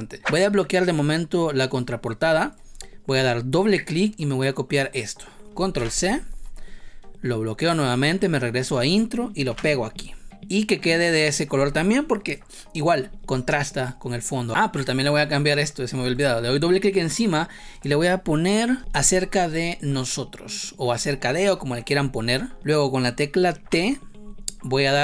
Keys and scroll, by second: 5.7 ctrl+c, 9.4 ctrl+v, 18.9 ctrl+Return, 23.5 t.